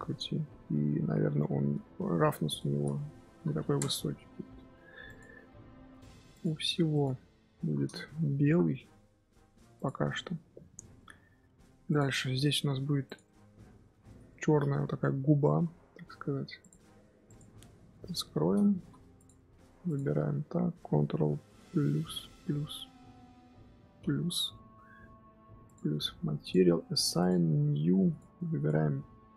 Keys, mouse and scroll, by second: 4.1-5.1 scroll up 2, 5.1 click, 7.0 shift+click, 9.8 ctrl+l, 10.1 scroll down 1, 10.2-10.9 scroll up 2, 10.9 shift+middle drag, 11.2-11.9 scroll up 2, 11.9 click, 12.0 scroll up 2, 12.3 Tab, 12.7 scroll up 1, 12.8 Tab, 13.0 click, 13.2-13.5 middle drag, 13.5-13.9 scroll up 1, 13.9 Tab, 14.2 shift+middle click, 14.5-14.8 scroll up 6, 14.8 3, 14.9 middle click, 15.4 z, 16.1 Tab, 16.6 click, 16.9 z, 17.3 click, 18.2 h, 18.8 z, 19.2 click, 19.3 Tab, 19.9 click, 21.8 KP_Add, 22.3 KP_Add, 23.8 KP_Add, 25.7-29.3 drag.